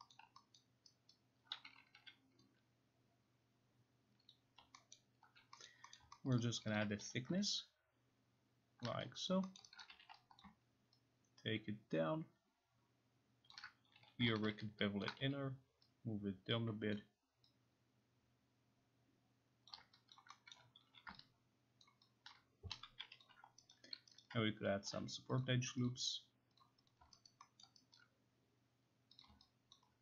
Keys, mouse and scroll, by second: 0.2 middle click, 0.6 alt+middle click, 1.2 alt+right click, 4.3 click, 5.0 alt+middle click, 5.7 middle click, 6.3 alt+middle click, 6.6 alt+middle click, 6.8 alt+click, 7.0 t, 8.9 ctrl+click, 9.3 alt+click, 9.6 alt+middle click, 9.8 right click, 9.9 e, 10.5 alt+click, 13.5 ctrl+click, 14.0 t, 15.1 ctrl+click, 15.2 e, 16.9 click, 19.7 ctrl+click, 20.1 alt+click, 20.5 alt+middle click, 20.8 t, 21.9 ctrl+click, 22.3 ctrl+click, 22.5-23.5 typing, 23.2 click, 23.7 alt+right click, 24.2 alt+right click, 24.7 k, 25.4 click, 25.4 l, 25.9 click, 26.6 click, 26.9 click, 27.3 alt+right click, 27.7 alt+middle click, 28.0 alt+right click, 29.2 click, 29.7 alt+click.